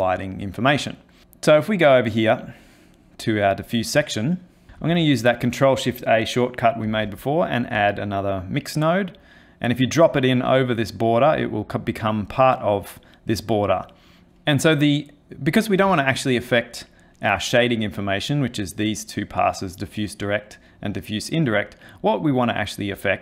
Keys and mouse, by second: 1.2 middle click, 1.8 middle click, 2.7 middle click, 3.2 middle click, 4.4 middle click, 4.8 ctrl+shift+a, 11.2 click, 16.2 ctrl+shift+click.